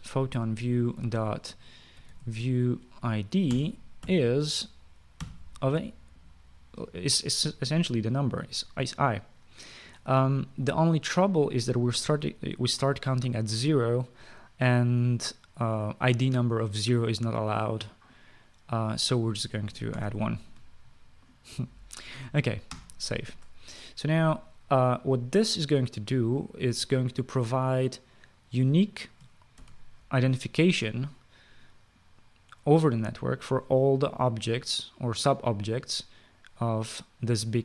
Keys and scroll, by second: 0.6 Return, 1.7-3.6 typing, 4.2 Return, 4.8-6.5 typing, 10.8 ;, 20.7 typing, 23.5 ctrl+s, 30.3 ctrl+s.